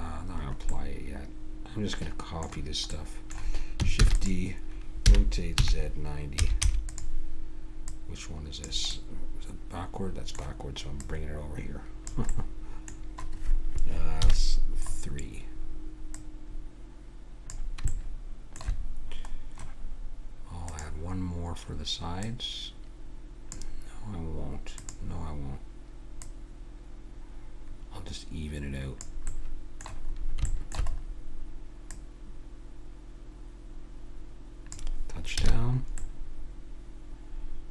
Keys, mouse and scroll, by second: 0.1 middle click, 4.0 shift+d, 5.0 r, 7.9-8.9 drag, 8.9-10.9 middle drag, 10.9-12.3 drag, 12.3-14.2 middle drag, 14.2 KP_3, 14.8-16.2 middle drag, 16.2-17.9 drag, 17.9-19.9 middle drag, 20.7-24.0 drag, 24.8-28.0 drag, 29.3-31.9 middle drag, 31.9-33.7 drag, 33.7-34.7 middle drag, 35.4 a, 35.5-36.7 middle drag.